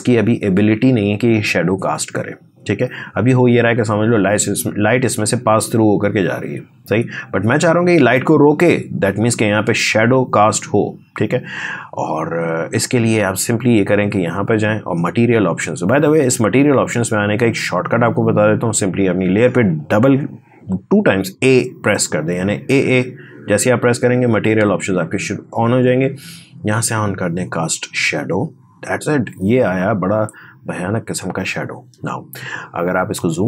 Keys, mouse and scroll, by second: 13.3 click, 22.5 typing, 27.3 click, 32.3-33.1 scroll up 1, 33.1 space, 33.3 click.